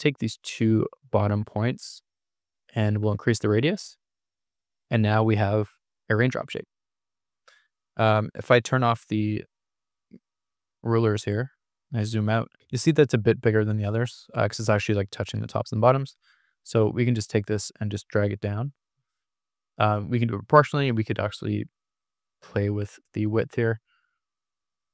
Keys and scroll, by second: 5.8 Escape, 9.3 ctrl+r, 10.5 super+-, 12.5 super+-, 13.7 super+=, 19.6 super+=.